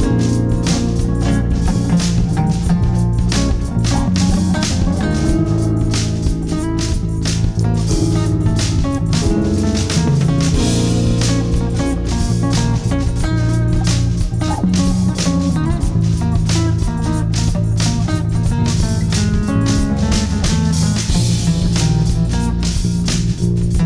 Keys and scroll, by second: 3.7 ctrl+q, 5.3 shift+F2.